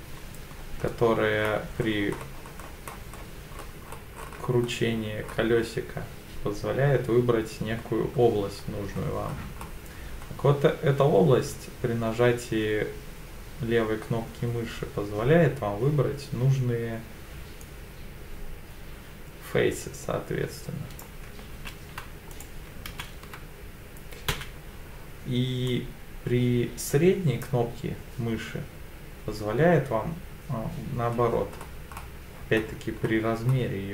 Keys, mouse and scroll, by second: 21.5 ctrl+z, 22.3 right click, 22.9 ctrl+z, 24.3 c, 31.2-31.6 scroll down 3, 31.5-32.3 scroll up 5, 32.3 scroll down 2, 33.0-33.4 scroll down 1.